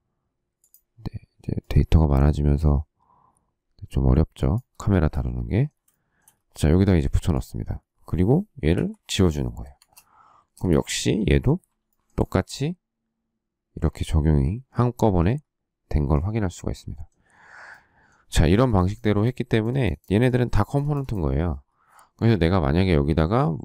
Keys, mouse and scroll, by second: 4.7 shift+middle click, 4.9 shift+double middle click, 5.9 shift+double middle click, 7.0 space, 8.6 Delete, 9.5 space, 9.6 Escape, 10.4 space, 10.5 Escape, 11.8 shift+middle click.